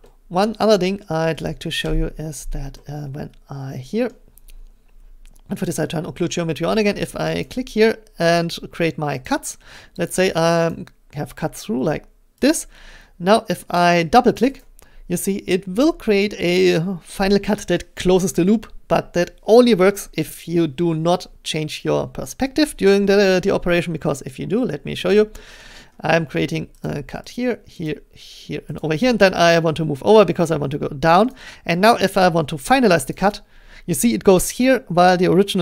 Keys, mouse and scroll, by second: 0.5-1.4 scroll, 1.8 Return, 4.0-4.4 scroll, 5.7 click, 7.4 click, 9.2 click, 10.1 click, 10.7 click, 12.5 click, 14.4 click, 14.6 click, 25.0 middle click, 25.8 middle click, 26.8 click, 27.3 click, 27.9 click, 28.8 click, 30.2 middle click, 31.3 click, 33.0 click, 33.1 click.